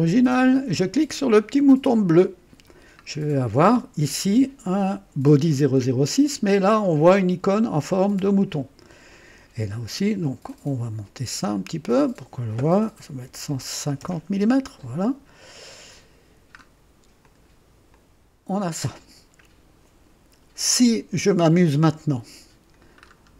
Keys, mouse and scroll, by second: 2.0 click, 3.0-3.4 scroll down 2, 7.5 click, 8.4 click, 10.4 click, 11.8 click, 13.2 KP_1, 13.6 KP_5, 13.9 KP_0, 15.7 click, 16.2 typing, 16.2-16.6 scroll down 1, 17.2 click, 17.9-18.8 drag, 23.0 scroll up 1.